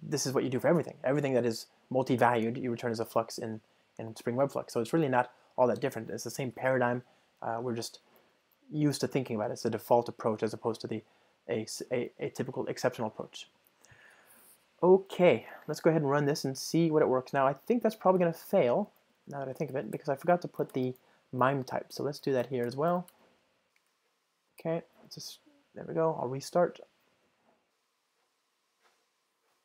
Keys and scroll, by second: 9.1 alt+super+l, 15.1 ctrl+r, 20.0 super+x, 20.5 Return, 21.8 super+v, 22.0 Return, 26.5 Return, 26.7 super+r.